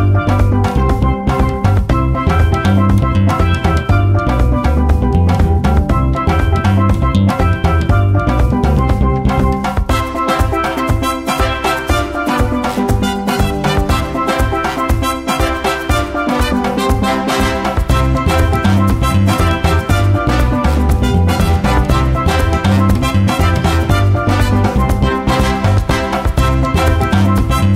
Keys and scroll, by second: 0.6 F1, 13.2 shift+., 17.9 1, 18.6 h, 18.9 ctrl+z, 19.0 g, 19.7 h, 24.9 F1.